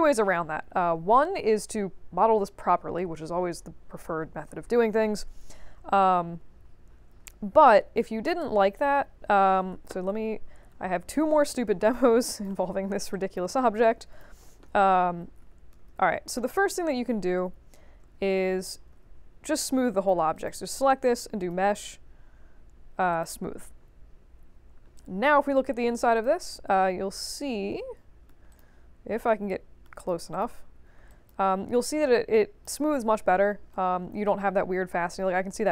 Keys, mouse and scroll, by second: 6.2 3, 7.2 middle click, 9.7 ctrl+d, 10.0-11.0 middle drag, 11.0-12.4 drag, 12.6 ctrl+z, 13.1 alt+click, 13.8 click, 16.5 middle click, 16.7-17.2 middle drag, 17.2 q, 18.0 space, 18.9 space, 19.8 click, 20.3 click, 21.3 click, 23.1 click, 24.7 alt+middle click, 24.9 alt+click, 26.1 click, 26.5 f, 26.9 middle click, 27.7 right click, 28.5 click, 29.2 right click, 29.9 click, 30.3 shift+click, 30.5 f, 31.0 alt+click, 31.4 scroll up 2, 31.9 alt+click, 33.7 right click.